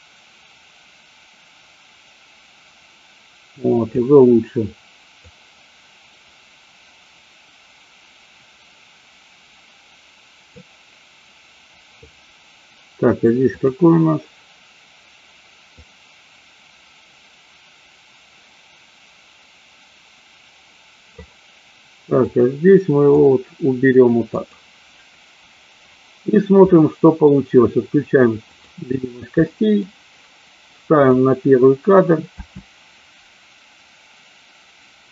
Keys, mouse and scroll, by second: 5.3 click, 13.6 click, 15.8-21.3 drag, 22.3-23.4 drag, 24.4 click, 26.8 middle click, 29.6 middle click, 31.2 click, 32.3 space.